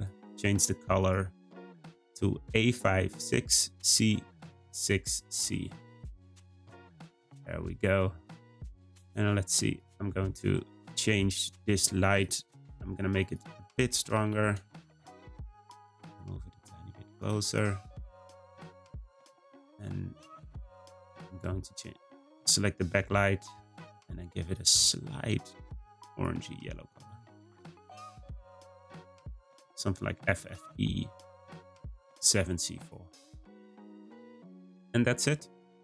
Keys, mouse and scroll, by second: 7.0 scroll up 1, 8.2-8.6 scroll down 1, 9.7 click, 12.1 click, 13.2-14.3 drag, 14.3 0, 15.4 g, 17.4 click, 17.8-18.3 scroll down 2, 20.5 click, 21.1 click, 21.7 middle click, 22.3 scroll down 1, 22.9 `, 24.4 click, 31.2 click, 32.8 click, 33.3-35.8 scroll up 3.